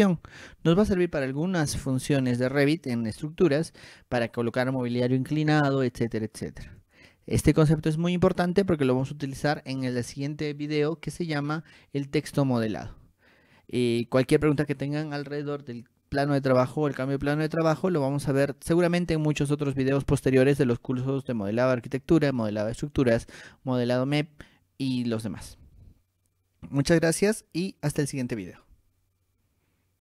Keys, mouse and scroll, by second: 7.0 click.